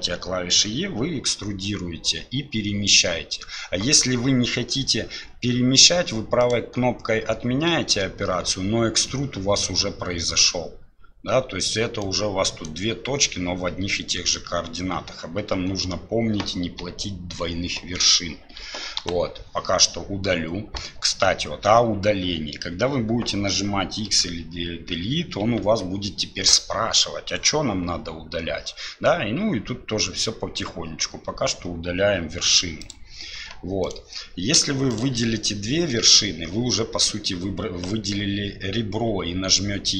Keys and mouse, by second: 12.0 right click, 19.0 Delete, 33.8 right click, 34.9 shift+right click, 39.1 e.